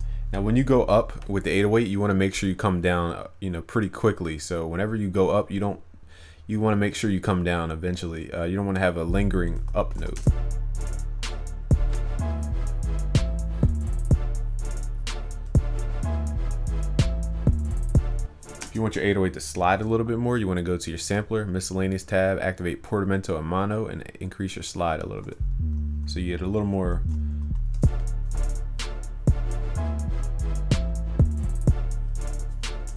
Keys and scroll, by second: 10.0 ctrl+s.